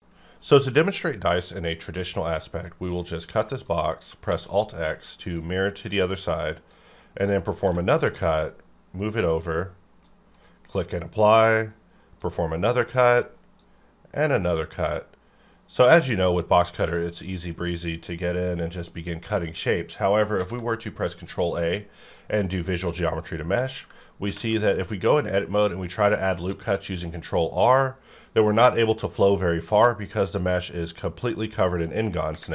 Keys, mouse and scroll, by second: 3.6 click, 4.3 alt+x, 5.2-7.6 drag, 7.6 g, 8.2 click, 11.5-15.8 drag, 20.4 ctrl+a, 21.5-23.5 drag, 23.5 Tab, 24.2 ctrl+r, 26.3-28.7 scroll up 2.